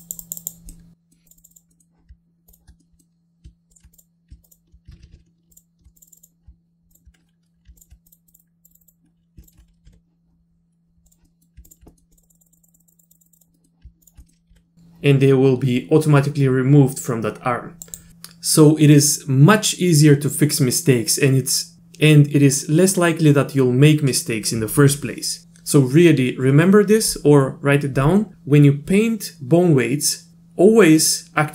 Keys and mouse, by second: 0.0 click, 0.2 click, 0.4 click, 0.7 middle click, 1.3 click, 1.4 click, 1.5 click, 1.7 middle click, 2.5 ctrl+click, 2.8 middle click, 3.7 ctrl+click, 3.9 click, 4.5 ctrl+click, 4.9 ctrl+z, 5.5 ctrl+click, 6.0 click, 6.1 click, 6.2 click, 8.1 click, 8.3 click, 8.4 click, 8.7 click, 8.8 click, 9.4 ctrl+click, 9.9 r, 11.2 middle click, 11.7 ctrl+click, 11.9 middle click, 12.1 click, 12.2 click, 12.3 click, 12.5 click, 12.6 click, 12.7 click, 12.8 click, 12.9 click, 13.0 click, 13.1 click, 13.4 click, 13.5 middle click, 14.2 middle click, 14.5 r.